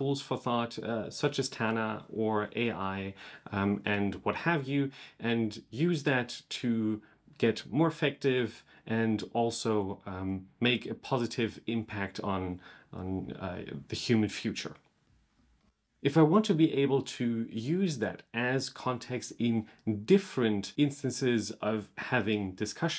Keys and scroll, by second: 15.4 super+/.